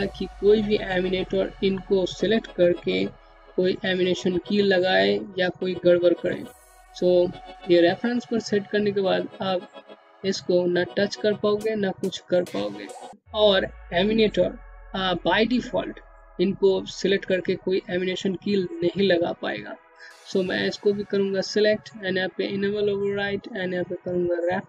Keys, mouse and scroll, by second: 6.7 click, 18.6 click.